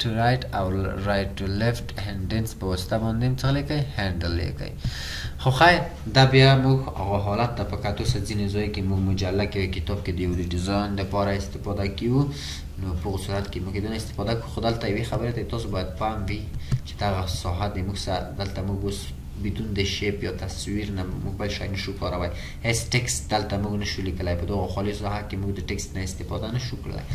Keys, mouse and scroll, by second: 5.4 scroll down 1, 5.6-8.2 scroll up 1, 8.2 scroll up 1, 8.3-9.2 ctrl+scroll down 1, 9.2-12.3 scroll up 1.